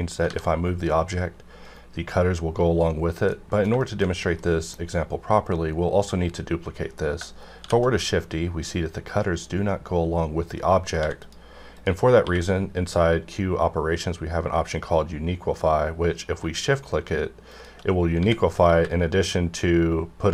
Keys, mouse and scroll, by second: 0.2 g, 1.6 right click, 3.0 scroll down 1, 3.3 middle click, 3.6 scroll down 1, 3.8-7.6 shift+middle drag, 7.6 shift+d, 10.6 right click, 10.9 x, 11.1 click, 12.1 q, 16.3 shift+q, 17.5 shift+click, 18.2 x, 18.7 y.